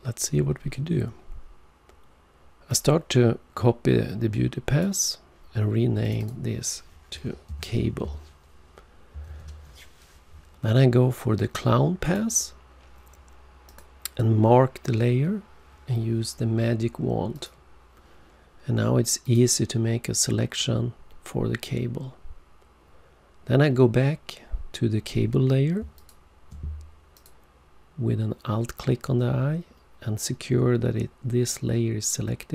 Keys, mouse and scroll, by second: 2.7 click, 6.0 click, 6.2 click, 6.2 double click, 7.5 c, 9.2-9.9 typing, 12.0 click, 13.7 click, 17.3 click, 19.2 click, 25.9 alt+click, 27.1 click.